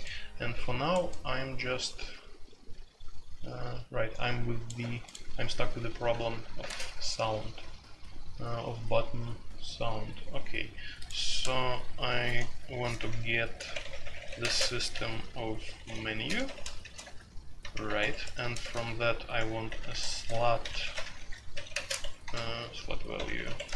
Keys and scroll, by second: 5.5 Escape, 6.5 space, 6.6 Tab, 12.2-23.7 typing, 17.0 Return, 22.0 Escape.